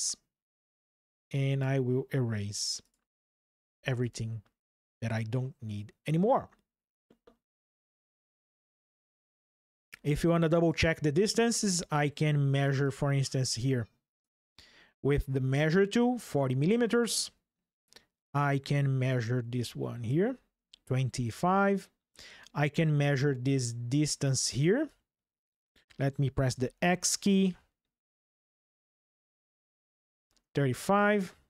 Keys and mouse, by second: 1.0 click, 2.1 Delete, 3.0 drag, 3.5 Delete, 6.9 ctrl+shift+7, 8.5-9.3 shift+drag, 10.3 click, 18.7 ctrl+click, 24.6 ctrl+click, 26.3 x, 29.9 ctrl+click.